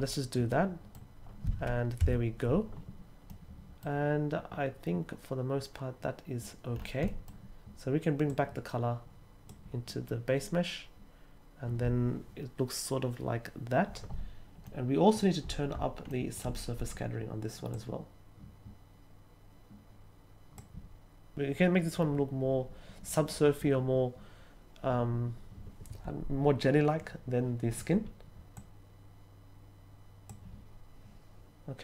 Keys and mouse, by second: 0.4-0.9 middle drag, 3.2 middle click, 7.0 middle click, 8.2-9.4 drag, 14.6 middle click, 16.0 middle click, 17.7-20.5 drag, 28.5-30.2 drag.